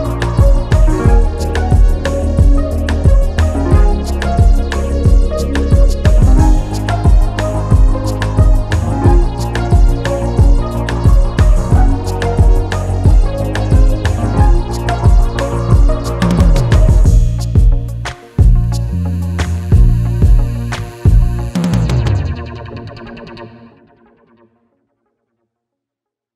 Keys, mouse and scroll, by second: 0.2 s, 1.6 g, 2.3 click, 2.8 scroll down 2, 3.0 middle click, 3.3-4.2 scroll up 2, 3.6 middle click, 4.2-6.4 drag, 10.9-13.2 drag, 15.2 scroll up 1, 15.3-16.2 scroll down 3, 16.2 shift+middle click, 16.5-16.8 scroll up 1, 16.8-19.6 shift+middle drag, 20.0-21.1 scroll down 9, 21.1 middle click, 21.4-21.7 scroll up 1, 21.7 middle click, 22.0-23.5 scroll up 2.